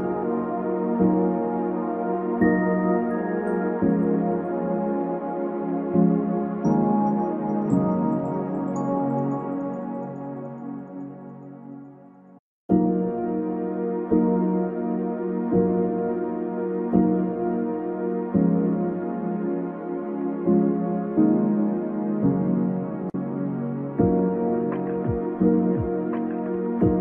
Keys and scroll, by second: 9.3 ctrl+v.